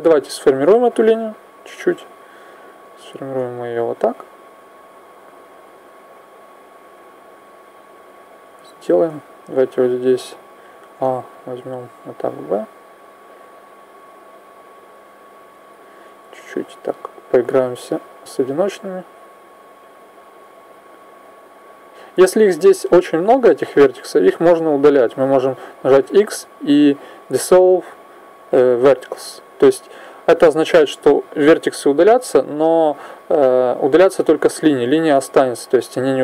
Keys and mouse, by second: 0.1 a, 2.7-5.7 drag, 6.3 click, 10.5 a, 13.8 click, 15.7 right click, 16.4 click, 20.1 right click, 21.0 click, 22.9-28.6 right drag, 25.7 x, 34.5 right click, 35.3 click.